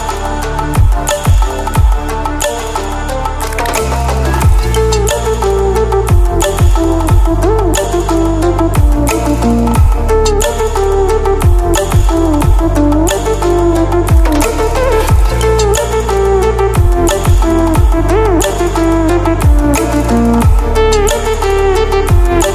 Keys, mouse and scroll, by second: 11.1-11.4 ctrl+alt+scroll down 1, 13.3 click, 16.2-17.1 click, 17.5-19.3 click, 21.6 ctrl+alt+scroll up 2.